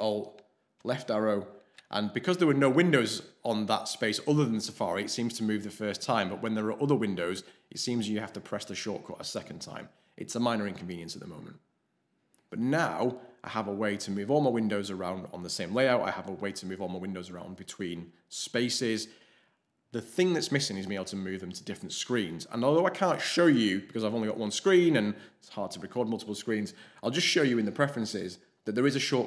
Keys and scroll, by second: 0.7 ctrl+alt+shift+Left, 1.1 ctrl+alt+shift+Left.